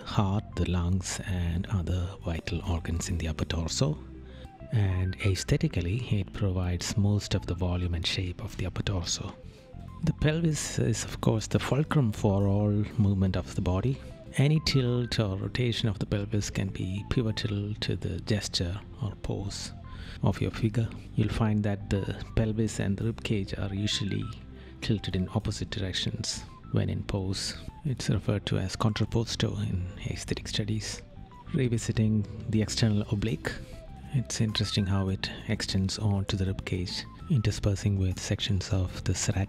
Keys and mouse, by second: 23.0 right click, 25.3 right click, 28.7 right click, 34.5 right click.